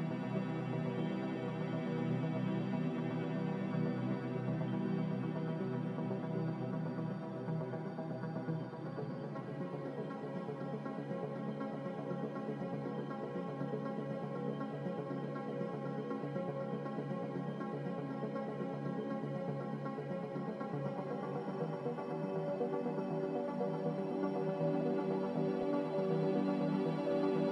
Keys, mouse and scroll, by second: 2.5 Delete, 23.6 Delete.